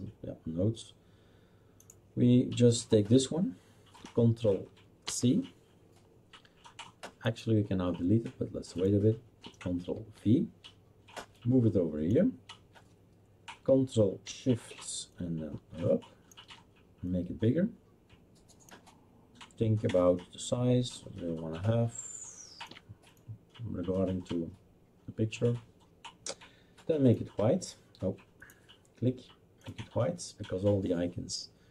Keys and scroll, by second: 5.0 ctrl+c, 9.9 ctrl+v.